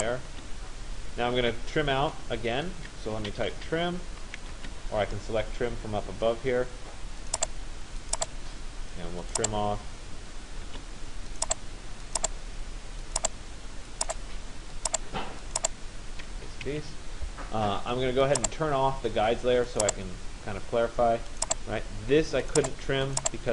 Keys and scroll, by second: 0.0 Return, 3.6 t, 4.6 Return, 10.3 Return, 16.4 Escape.